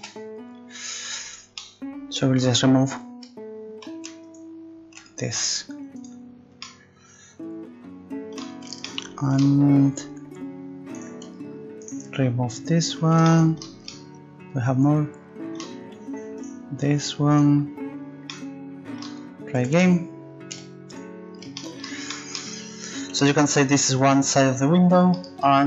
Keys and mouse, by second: 0.0 KP_Decimal, 4.3-6.0 right drag, 6.1-7.6 drag, 8.9-9.9 middle drag, 11.0 right click, 13.3-14.5 middle drag, 15.0 middle click, 16.8 right click, 18.3-19.6 middle drag, 19.6 a, 19.7 a, 20.5 u.